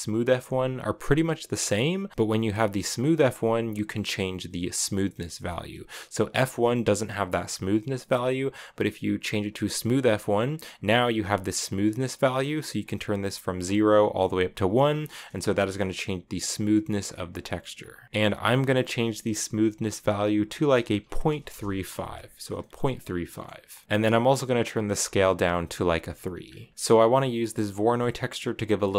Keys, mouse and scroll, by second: 5.6-14.7 drag, 14.7-15.0 scroll up 3, 14.8 shift+middle drag, 16.3-18.0 drag, 18.2-21.3 drag, 22.1 scroll down 4, 22.3 middle click, 22.7 click, 23.1-24.7 middle drag, 24.7 click, 26.2-26.9 scroll down 2, 26.5 shift+middle click, 26.9-27.8 scroll up 1, 27.8-28.4 scroll up 1, 28.4-28.9 scroll down 1.